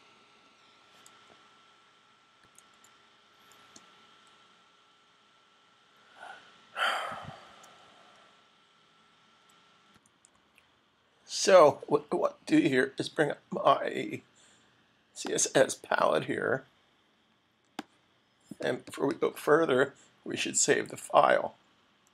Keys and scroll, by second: 9.8 super+`.